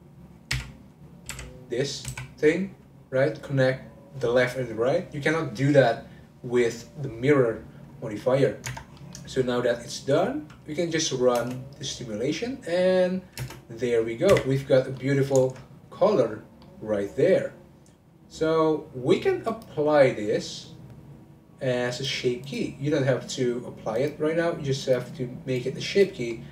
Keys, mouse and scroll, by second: 0.5 f, 0.9 middle click, 1.3 3, 8.0 scroll down 1, 8.2 middle click, 8.6 Tab, 9.0 middle click, 9.7-11.3 scroll down 1, 11.3 space, 13.4 space, 14.3 Right, 14.9-16.3 middle drag, 16.3-16.6 scroll down 2, 16.6-19.4 middle drag, 19.4-22.5 drag, 23.9 click, 24.8 click, 25.6 click, 26.3 middle click.